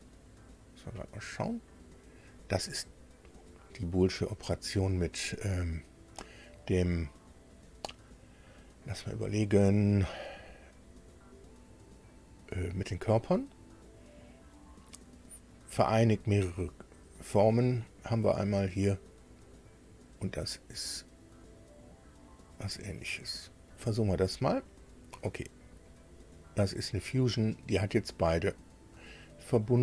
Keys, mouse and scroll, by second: 23.7 click, 25.9 click, 29.3 click.